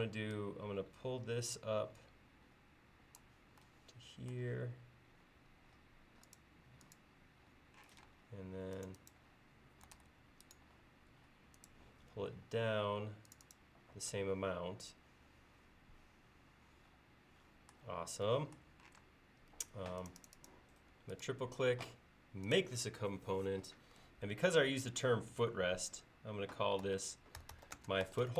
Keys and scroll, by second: 5.5 l, 8.0 p, 10.0 super+z, 19.1 space, 26.9-28.3 typing.